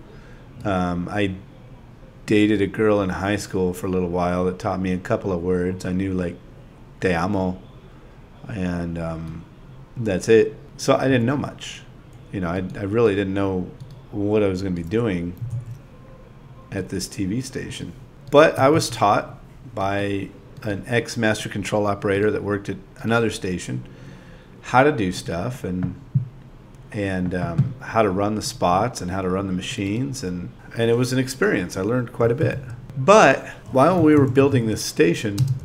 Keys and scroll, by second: 0.6-2.0 typing, 4.6 ,, 5.6 ., 6.3 ,, 8.0 space, 8.9 space, 13.2-17.2 typing, 19.1 z, 26.8-27.5 typing, 31.1-32.5 typing.